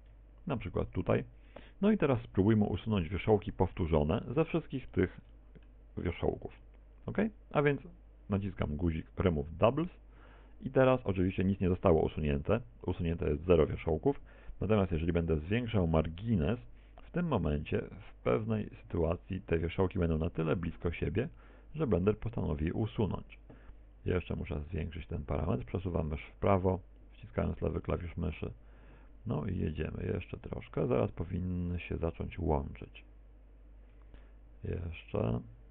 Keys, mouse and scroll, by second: 0.3 shift+right click, 0.8 shift+right click, 1.8 shift+right click, 2.2 shift+right click, 2.8 shift+right click, 3.1 shift+right click, 4.2 KP_1, 5.1 shift+middle click, 6.0 shift+d, 7.7 ctrl+click, 7.8 middle click, 9.4 middle click, 9.8 a, 10.0 a, 11.3 shift+middle click, 11.7 middle click, 12.4 middle click, 16.0 click, 21.4 click.